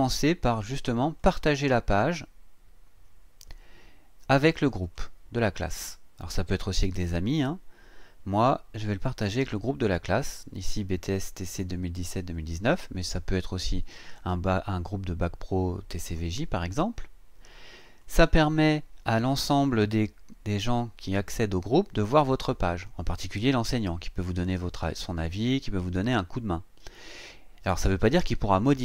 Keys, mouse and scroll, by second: 1.2 click, 4.8 click, 11.7 click, 18.0 click.